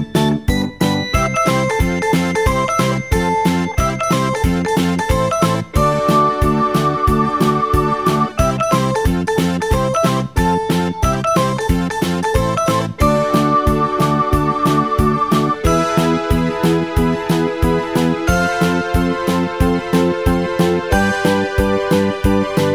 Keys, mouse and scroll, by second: 3.8 click, 5.6-8.5 drag, 16.6-19.1 drag, 19.9 click.